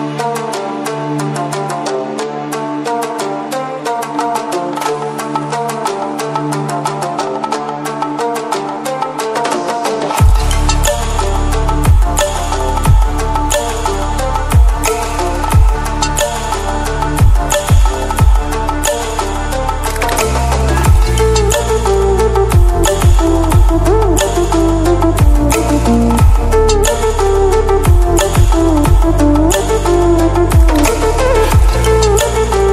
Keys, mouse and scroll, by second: 2.1-8.7 drag, 9.4 scroll down 1, 12.2 scroll up 1, 15.5-25.7 drag, 17.0-17.7 typing, 28.0-28.7 scroll down 1, 32.4 click.